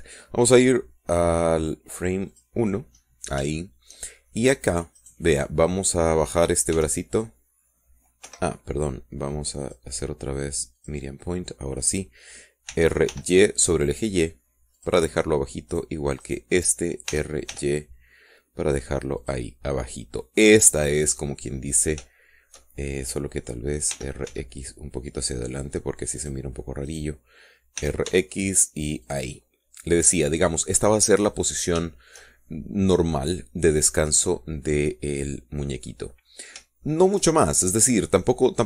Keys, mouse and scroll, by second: 3.5 click, 4.8 shift+click, 6.2 click, 8.0 r, 9.4 Escape, 10.8 click, 12.0 click, 13.9 r, 14.3 y, 16.0 click, 16.9 click, 17.4 click, 18.3 r, 18.7 y, 20.4 click, 21.2-23.0 middle drag, 25.1 r, 25.5 x, 27.4 click, 28.1 right click, 29.0 r, 29.3 x, 30.2 click, 30.6-32.4 middle drag, 32.4 scroll up 2, 32.7-33.1 scroll down 3, 33.1-37.3 shift+middle drag, 37.3 scroll down 2, 37.4-37.7 scroll up 2, 38.1 shift+middle click.